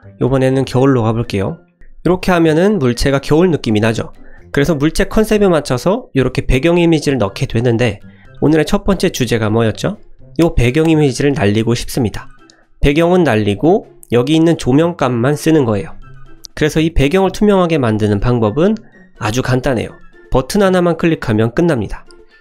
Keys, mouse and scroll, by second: 1.3 click, 1.6-2.6 middle drag, 2.8 click, 3.1-3.5 middle drag, 9.1 click, 9.9-10.2 middle drag, 10.5 click, 15.0 click, 15.3-16.5 middle drag, 17.1 middle drag, 21.7-22.4 drag.